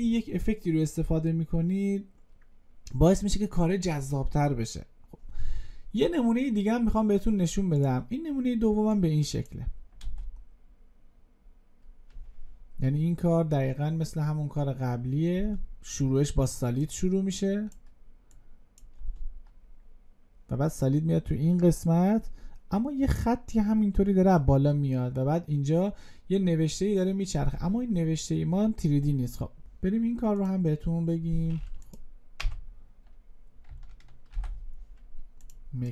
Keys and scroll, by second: 34.2 ctrl+y.